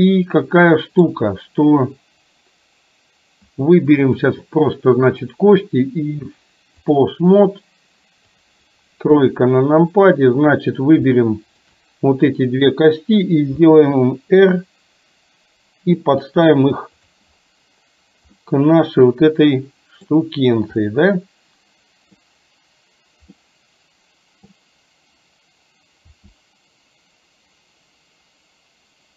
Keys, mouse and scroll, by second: 0.0-1.1 middle drag, 4.1 click, 5.4-7.1 drag, 8.5 click, 9.1 KP_3, 11.5 shift+click, 13.6 r, 18.4-20.2 middle drag, 20.9-22.2 middle drag, 23.4-24.6 middle drag, 26.2 r.